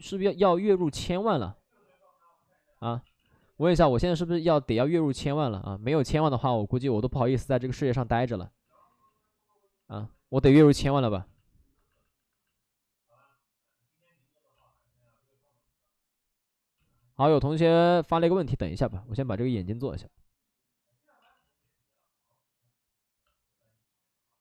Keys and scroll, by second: 0.6 ctrl+z, 3.0 ctrl+z, 3.3 ctrl+z, 10.7 ctrl+z, 11.0 ctrl+z, 11.0 ctrl+z, 14.5 ctrl+z, 17.6 ctrl+z, 18.9 ctrl+z, 19.0 ctrl+z, 21.2 ctrl+z.